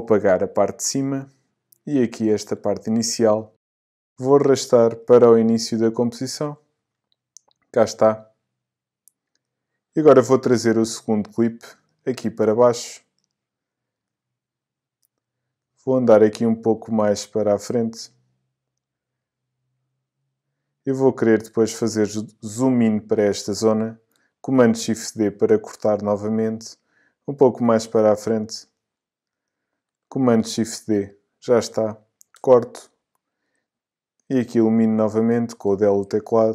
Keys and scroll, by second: 0.2 BackSpace, 2.6 BackSpace, 30.5 shift+super+d, 32.4 BackSpace, 35.6 BackSpace.